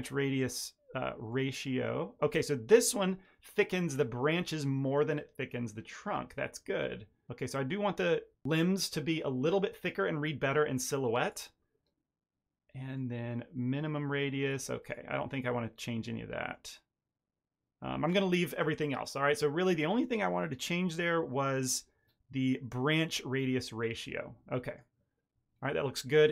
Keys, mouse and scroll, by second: 1.2 click, 12.9 click, 23.3 click, 25.2-25.9 scroll down 2, 26.1-26.3 scroll down 2.